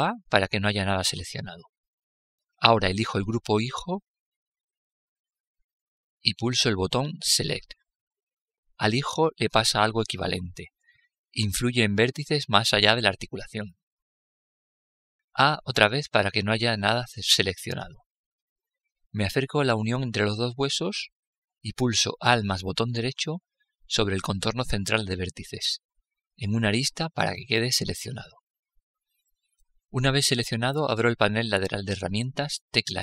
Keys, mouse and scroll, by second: 2.7-4.7 drag, 6.5-8.5 drag, 8.1 middle click, 16.0 a, 18.6-20.9 middle drag, 24.6-26.5 right drag, 27.7-29.5 middle drag, 30.5-32.4 middle drag, 32.0 n.